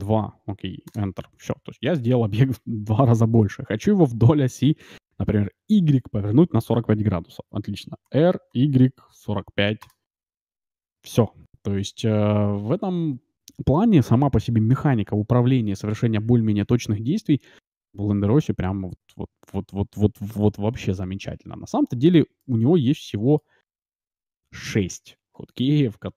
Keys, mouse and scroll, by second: 8.0 r, 21.7-24.0 middle drag, 25.5-26.1 middle drag.